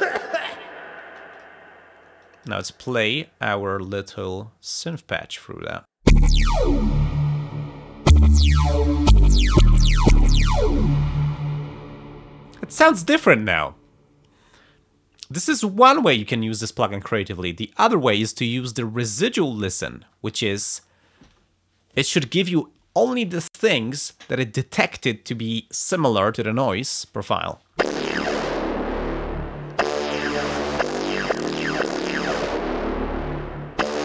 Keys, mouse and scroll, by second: 1.1 space, 1.3 click, 2.2 click, 3.0 click, 3.7 click, 4.1 click, 4.8 click, 5.3 click, 6.0 space, 11.9 space, 20.6 click, 27.2 click, 27.7 space.